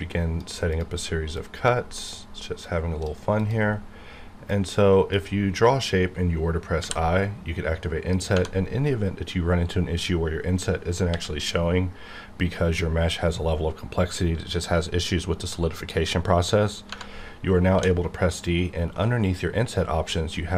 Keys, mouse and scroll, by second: 8.3 Tab, 10.1 Right, 11.1 t, 16.9 Tab, 17.7 d.